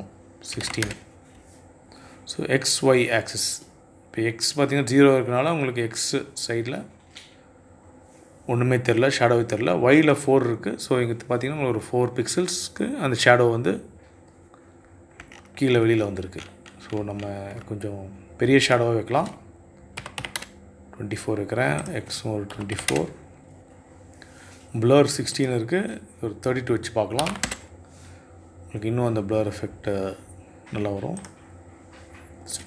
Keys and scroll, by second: 0.1 Return, 19.3 KP_2, 19.5 KP_4, 19.7 Return, 21.9 KP_2, 22.1 KP_4, 22.2 Return, 26.5 KP_3, 26.8 Return.